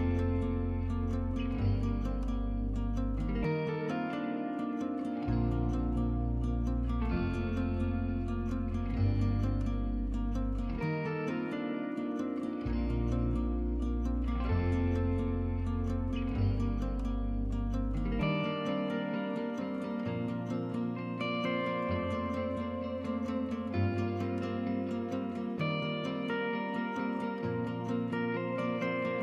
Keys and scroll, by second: 2.4-2.9 typing, 8.3-11.4 typing, 12.5 typing, 15.3-16.0 typing.